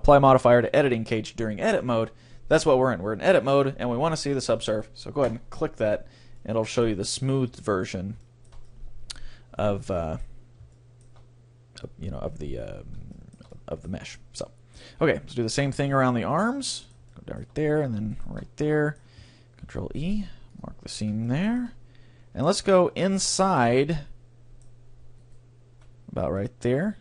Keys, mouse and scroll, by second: 5.4-7.0 drag, 6.4-10.7 middle drag, 10.8-12.6 middle drag, 13.1-19.2 middle drag, 16.0-17.6 right drag, 18.2-19.2 right drag, 19.6 right click, 19.7 ctrl+e, 19.9 middle click, 21.2-25.8 middle drag, 25.2-27.0 right drag, 26.4-27.0 middle drag.